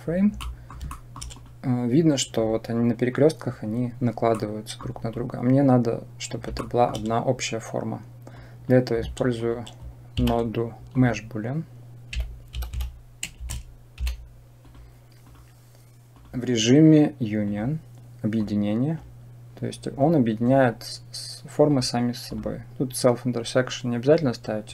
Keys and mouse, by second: 0.3 middle click, 0.9 shift+middle click, 4.3 middle click, 6.4-6.8 shift+middle drag, 8.2-9.3 drag, 10.1 shift+a, 10.9 Delete, 16.0-17.4 drag, 18.3 click, 21.5 click, 22.1 click.